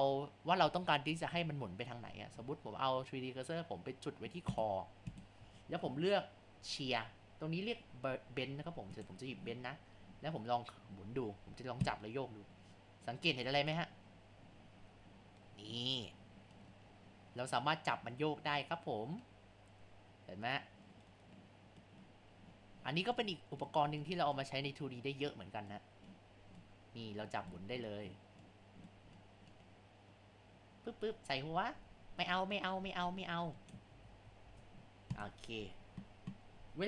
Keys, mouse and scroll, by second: 4.5 click, 5.1 click, 8.9-12.2 drag, 34.0 ctrl+z, 34.4 shift+s.